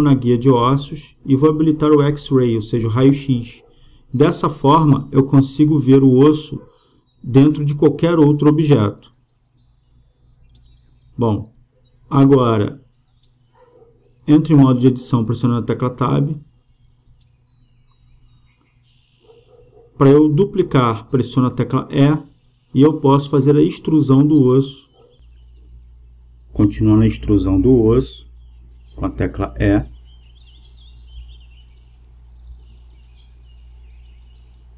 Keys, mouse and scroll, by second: 2.3-4.1 drag, 4.3-7.0 middle drag, 7.0 KP_0, 14.4 Tab, 15.7-17.6 drag, 20.7 e, 28.8 e, 32.8 e.